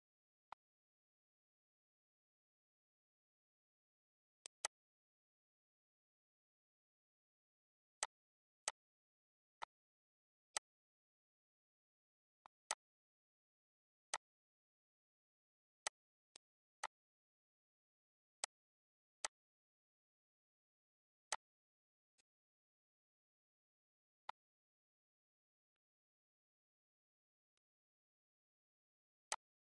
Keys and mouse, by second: 0.4 click, 2.0 click, 3.2 z, 3.4 click, 4.4 click, 6.5 click, 8.0 click, 8.7 click, 9.2 ctrl+s, 9.3 z, 9.6 click, 10.5 click, 12.5 click, 14.2 click, 14.6 click, 15.9 click, 16.3 click, 16.8 click, 18.4 click, 19.2 click, 20.8 click, 21.2 click, 22.1 click, 23.1 click, 24.2 click, 25.8 click, 27.5 click, 28.6 click, 29.2 click.